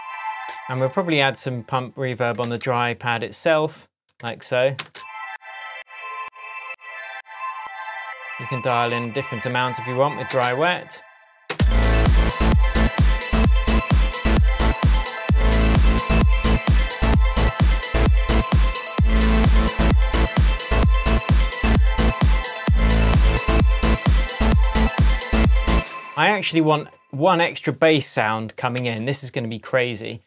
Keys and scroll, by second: 0.7 space, 2.4 super+c, 4.3 super+v, 4.8 super+space, 10.3 space, 11.5 space, 25.7 space, 28.8 super+d.